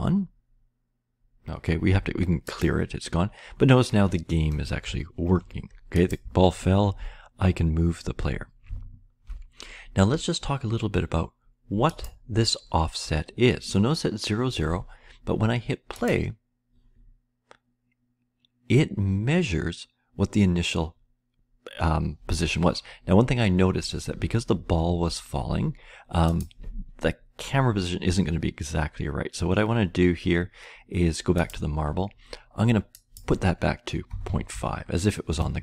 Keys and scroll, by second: 4.8 Left, 5.3 Left, 5.4 Left, 6.2-6.9 Left, 7.0-8.0 Right, 8.6 Left, 8.6 Right, 9.1 Left, 9.2 Left, 33.8-35.0 typing, 35.4 Return.